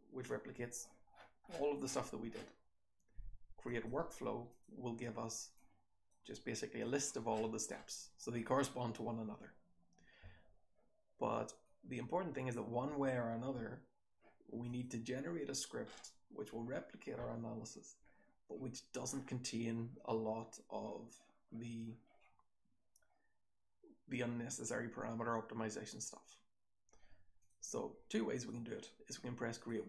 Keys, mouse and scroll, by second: 4.5 click, 29.5 click.